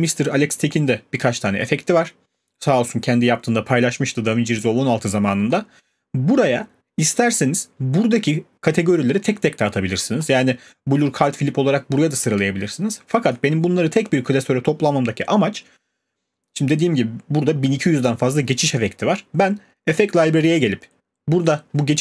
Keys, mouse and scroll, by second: 15.6 click, 20.0 click.